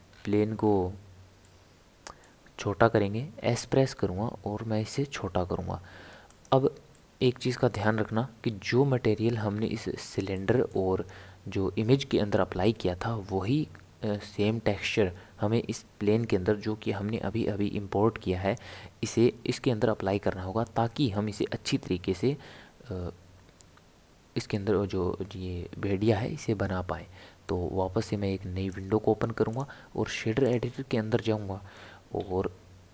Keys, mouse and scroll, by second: 0.1-0.7 scroll down 3, 0.7 scroll up 1, 0.8-1.4 scroll down 1, 1.4-3.4 middle drag, 3.4 s, 6.9-8.1 middle drag, 8.1 KP_7, 9.1-9.8 scroll up 7, 10.3-13.4 shift+middle drag, 27.5-32.2 drag, 32.2 n.